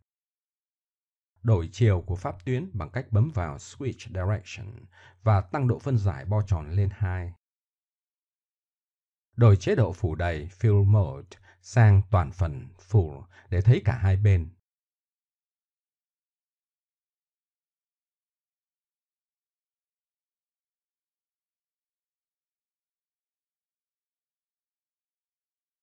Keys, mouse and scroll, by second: 2.2 a, 2.6 a, 3.6 click, 4.8 middle click, 6.0-7.9 drag, 7.9 middle click, 8.7 middle click, 10.3 middle click, 11.7-12.3 drag, 12.5-13.9 middle drag, 14.7 click, 15.4 middle click, 16.0 click, 16.7 middle click, 18.1 middle click, 18.6 click, 18.9 Tab, 19.0 a, 19.1 a, 20.8-22.4 middle drag, 23.0 middle click, 24.1 middle click, 24.6 middle click, 25.5 KP_1.